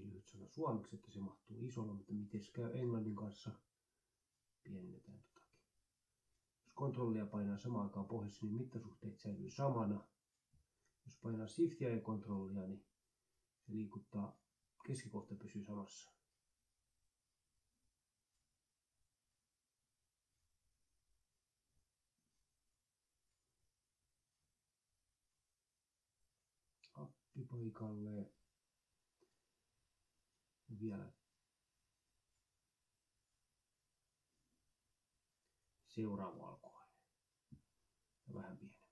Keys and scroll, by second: 0.6 ctrl+Left, 1.1 Delete, 17.1-18.8 typing, 19.0 Delete, 19.8 ctrl+Left, 20.6 Delete, 29.6-33.6 typing, 33.7 Delete, 34.9 Delete, 35.3 ctrl+Down, 36.2 ctrl+Left, 36.8 Delete.